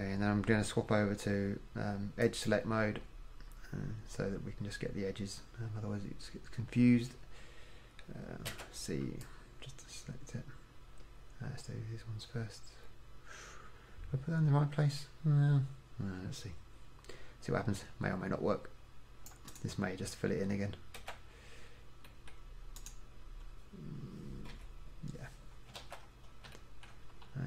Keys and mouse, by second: 8.7 c, 19.6 middle click, 21.1 c, 21.6-24.3 middle drag, 24.6 f, 26.0 ctrl+z.